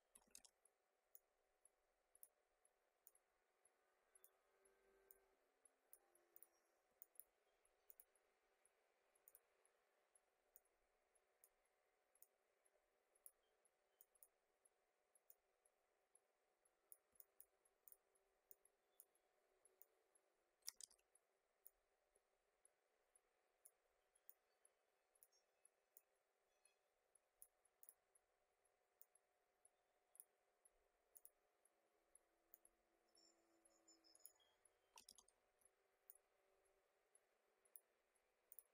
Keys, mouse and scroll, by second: 0.3 ctrl+z, 1.1-6.3 drag, 6.9 space, 7.0 click, 7.1 space, 7.9 click, 9.3 click, 10.5-15.4 drag, 17.0 space, 17.1 click, 17.3 space, 17.8-20.8 drag, 20.8 ctrl+z, 21.6-31.1 drag, 32.5-35.1 drag, 35.1 ctrl+z, 35.4 alt+scroll up 1, 36.0-38.5 drag.